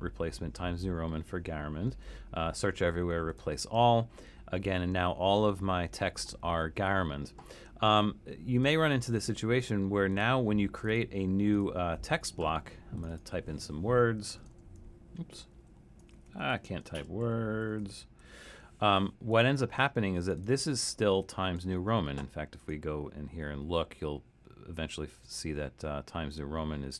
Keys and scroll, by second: 14.4-18.7 typing.